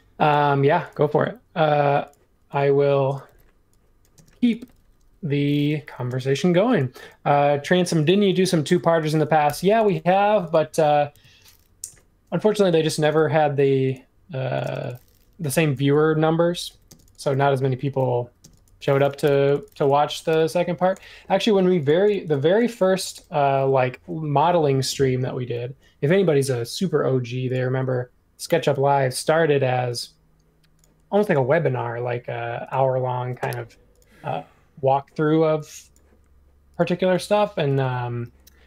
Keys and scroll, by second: 0.9 ⟲, 3.2 e, 4.1 space, 5.8-6.2 typing, 8.6 super+c, 9.4 BackSpace, 11.1 shift+v, 11.9 |, 13.1 ↺, 14.6 space, 15.5 p, 17.5-19.2 typing, 20.3 super+g, 37.8 super+1.